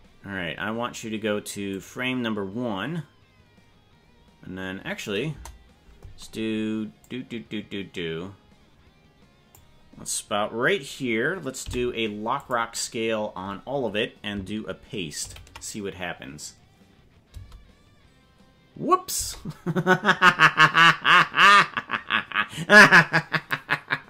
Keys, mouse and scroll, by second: 1.7 click, 5.3 KP_0, 7.1-9.7 drag, 11.6 i, 15.3 ctrl+v, 17.3 space, 19.2 space.